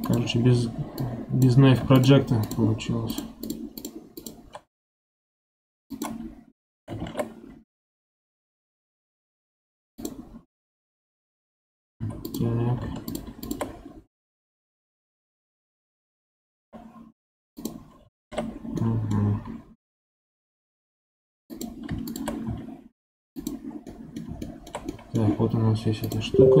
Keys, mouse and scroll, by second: 0.9 click, 1.9 shift+click, 2.3 shift+click, 3.0 shift+click, 3.4 shift+click, 3.7 shift+click, 4.1 shift+click, 5.3 x, 6.9 ctrl+z, 9.3 x, 11.9 2, 12.2 click, 13.0 shift+click, 13.3 shift+click, 18.1 ctrl+z, 18.7-21.4 middle drag, 21.4 click, 22.0 shift+click, 22.4 x, 23.8-26.6 middle drag.